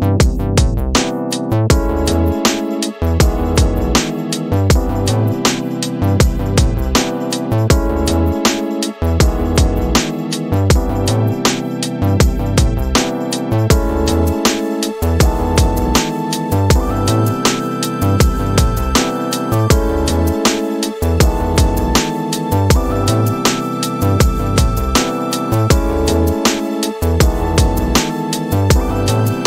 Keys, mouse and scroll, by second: 1.0 middle click, 4.8 click, 7.1 g, 9.5 click, 11.3 g, 15.7-20.6 drag, 21.5 g, 23.9-29.0 drag.